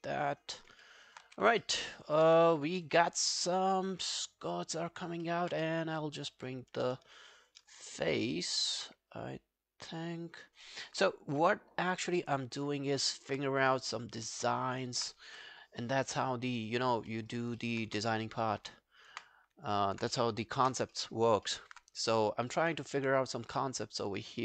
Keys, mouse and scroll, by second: 0.9 alt+middle click, 1.1 alt+right click, 1.3 w, 1.6 alt+middle click, 1.8 alt+right click, 2.0 alt+click, 2.3 q, 2.6 alt+middle click, 2.9 alt+click, 5.0 alt+right click, 5.3 alt+middle click, 5.6 q, 5.8 right click, 7.5 shift+click, 7.8 alt+click, 8.3 alt+middle click, 8.7 alt+click, 10.4 alt+scroll down 3, 10.7 alt+middle click, 12.5 alt+middle click, 12.6 alt+middle click, 13.0 alt+click, 13.5 right click, 14.4 alt+middle click, 14.6 alt+right click, 14.9 alt+click, 15.3 r, 17.1 alt+middle click, 17.3 alt+right click, 17.6 alt+middle click, 17.9 space, 19.1 space, 19.8 alt+middle click, 21.0 alt+middle click, 21.3 alt+right click, 21.5 alt+middle click, 21.9 right click.